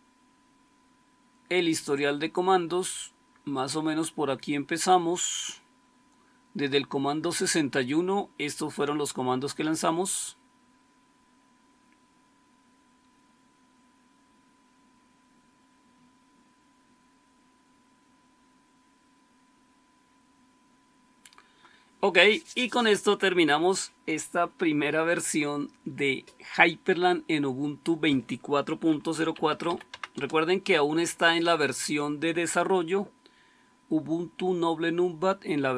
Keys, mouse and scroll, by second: 28.8-30.1 typing.